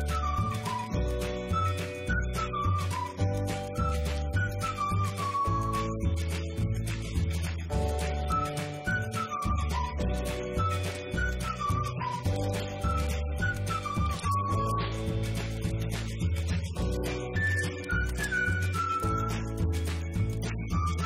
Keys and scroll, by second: 4.6 Escape, 7.8-9.8 typing, 11.0 Return, 11.4 Up, 12.6-13.6 typing, 14.7 /, 16.9-18.8 typing, 19.0 Up, 20.0 F2, 20.1 Left, 20.9 Return.